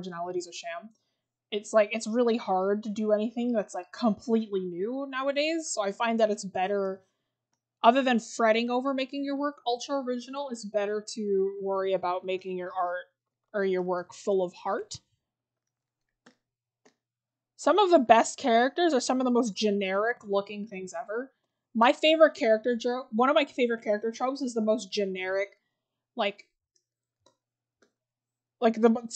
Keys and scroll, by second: 4.6-5.1 scroll down 1, 6.0 scroll up 1, 11.6-12.2 scroll down 1, 13.0 scroll, 14.0 scroll, 14.6-15.5 scroll up 1.